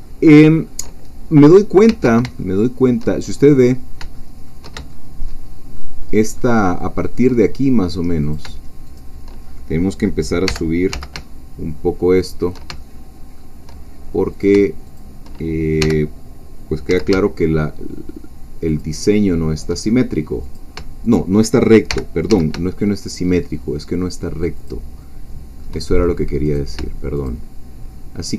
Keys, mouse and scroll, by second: 0.0-1.3 shift+middle drag, 1.5-1.9 scroll down 2, 2.4 ctrl+shift+middle click, 3.3-4.0 shift+scroll up 3, 4.1 shift+middle click, 4.9-5.9 shift+middle drag, 6.0-7.3 shift+middle drag, 8.2 shift+click, 10.5 g, 10.9 z, 12.2 shift+click, 12.8-14.2 shift+middle drag, 14.3 click, 15.0 shift+click, 15.8 g, 16.9 z, 18.7 shift+click, 19.1-20.2 shift+middle drag, 20.2-20.6 scroll up 1, 20.6 click, 21.0 shift+click, 21.9 g, 22.3 z, 24.6 shift+click, 25.0-26.2 shift+middle drag, 26.6 click, 27.2 shift+click.